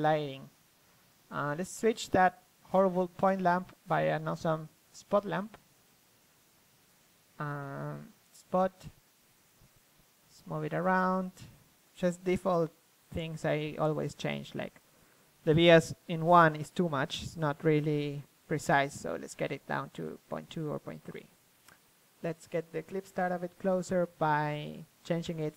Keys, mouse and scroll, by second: 0.0 Escape, 0.3 KP_1, 0.7 click, 1.2 a, 1.8-3.1 drag, 2.7 KP_3, 5.4 alt+r, 6.7-8.5 drag, 9.0-10.5 drag, 9.5 r, 10.5 middle click, 10.6-11.9 drag, 11.2 KP_1, 11.9 r, 12.0 click, 12.3 middle click, 12.7-14.5 drag, 13.1 KP_1, 14.5 KP_3, 15.0 r, 15.5-17.4 drag, 19.0-21.4 drag, 22.5 click, 23.4 middle click, 23.8 w.